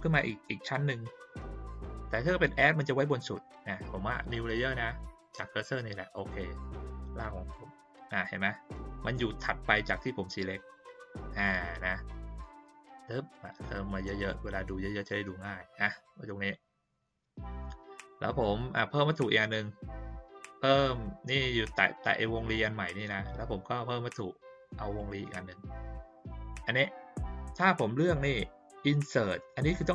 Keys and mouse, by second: 6.1 click, 7.2 click, 12.6 click, 14.3 click, 24.9 click.